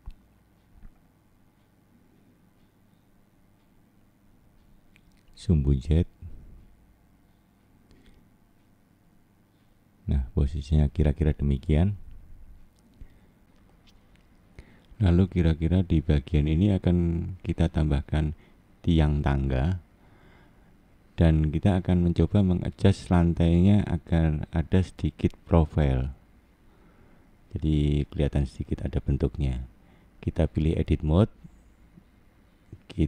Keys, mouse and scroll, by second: 0.0 click, 1.4 click, 2.9 middle click, 4.3 click, 5.2 middle click, 7.5 click, 8.8 click, 10.8 middle click, 14.8 scroll down 2, 16.2 shift+middle click, 16.8-17.6 scroll up 4, 17.6 shift+middle click, 22.5 click, 24.9 click, 26.6 click, 31.1 shift+middle click, 32.1 scroll up 2, 33.0 shift+scroll up 1.